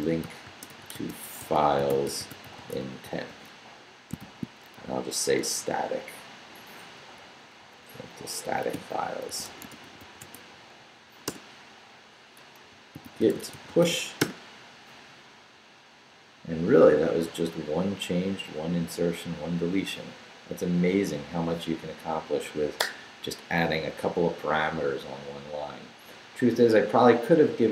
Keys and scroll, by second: 0.0-4.7 typing, 4.9 shift+Left, 5.5 Left, 7.2 Left, 7.6 Right, 9.0-10.7 typing, 11.2 Return, 12.4-14.3 typing.